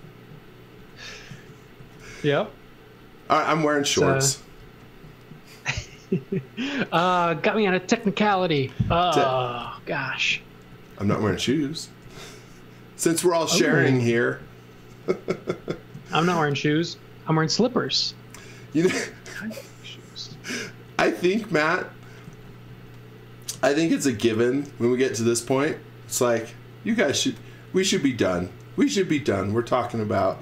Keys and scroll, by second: 0.6-3.1 typing, 4.3 x, 4.6 v, 5.8 space, 9.1-10.7 typing, 12.1 l, 18.6 x, 18.9 v, 20.9 space, 22.3 z, 22.7 x, 23.4 m, 27.0 b, 29.7 space.